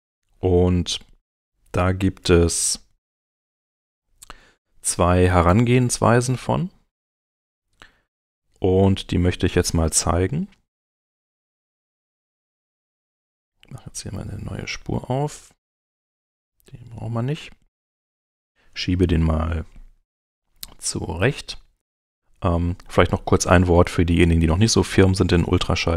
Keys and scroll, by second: 8.3 alt+super+c, 14.1 super+v.